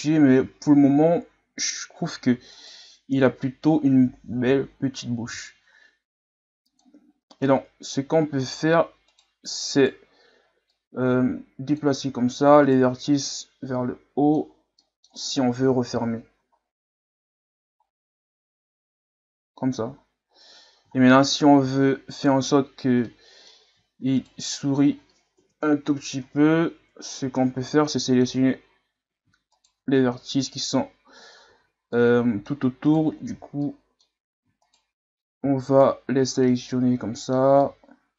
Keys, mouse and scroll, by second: 0.0-0.9 scroll up 2, 1.1-1.6 scroll up 5, 1.6 Tab, 2.5 alt+right click, 4.4 o, 5.2 s, 7.4-8.5 middle drag, 8.5-8.9 scroll up 2, 9.1 right click, 9.7 right click, 10.7-12.6 drag, 12.6 right click, 13.3-14.5 drag, 14.5-14.8 scroll down 1, 14.8 middle click, 15.6 KP_1, 15.9 Tab, 16.6-17.8 scroll down 3, 17.8-19.5 scroll down 2, 19.5-19.9 scroll down 1, 19.9-20.9 scroll up 6, 20.9 scroll down 3, 21.2-21.5 scroll up 1, 21.5 Tab, 22.1 right click, 23.1-24.2 middle drag, 24.2 shift+right click, 25.4 ctrl+KP_Add, 27.0 ctrl+KP_Subtract, 28.0 middle click, 28.3-29.0 scroll up 2, 29.5 shift+right click, 30.3-31.5 middle drag, 31.5 z, 32.0 middle click, 32.8 right click, 33.3 z, 33.6 middle click, 34.6 shift+right click, 35.7 shift+right click, 36.4-38.1 middle drag.